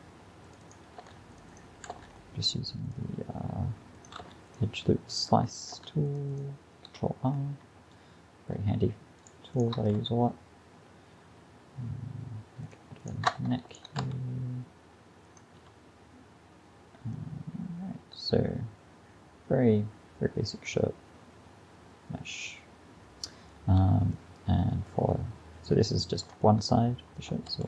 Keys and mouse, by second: 1.0 ctrl+r, 1.9 ctrl+r, 4.3 ctrl+r, 5.8 ctrl+r, 6.9 a, 10.0 g, 14.1 g, 15.6 a, 18.0 click, 23.8 a, 24.2-26.0 middle drag, 27.5 shift+d.